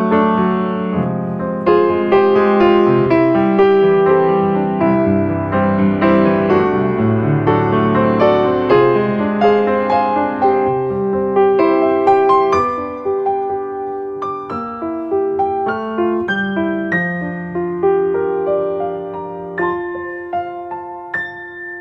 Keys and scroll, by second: 8.2 space.